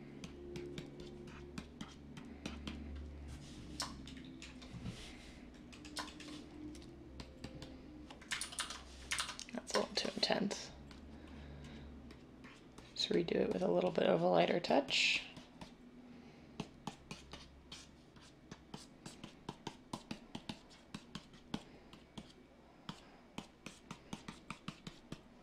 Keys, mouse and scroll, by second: 8.4 ctrl+z, 8.6 ctrl+z, 9.1 ctrl+z.